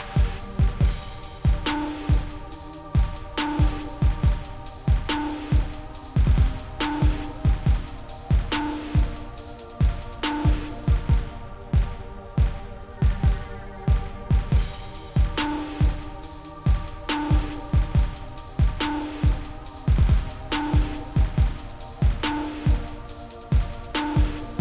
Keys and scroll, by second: 19.9-20.8 typing.